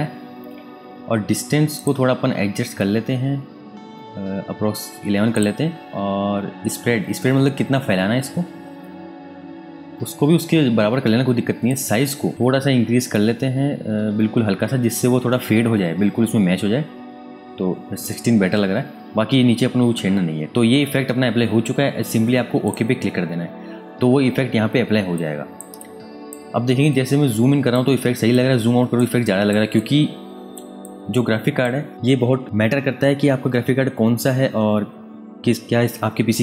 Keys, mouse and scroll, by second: 1.7 click, 2.1-3.4 scroll up 1, 3.4-5.3 scroll down 1, 5.3 click, 6.1-6.4 scroll up 1, 9.9 scroll down 1, 10.1-11.5 scroll up 1, 11.6 click, 12.7-16.1 scroll up 1, 16.1-16.7 scroll down 1, 17.3-19.4 scroll up 1, 22.6 click, 24.3 space, 25.1 alt+click, 26.9 click, 28.3 alt+click, 29.7 click.